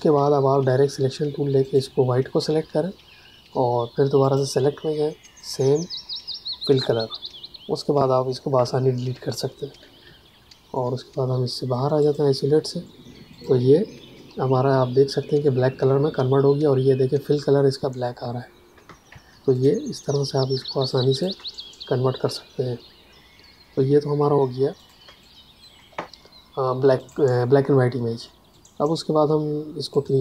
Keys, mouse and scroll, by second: 1.6 click, 8.4 Delete, 10.0 v, 11.9 click, 18.8 space, 19.5 ctrl+alt+click, 20.8 click, 24.2 Escape, 24.7 click, 24.9 space, 25.1 click, 25.4 space, 26.9 click.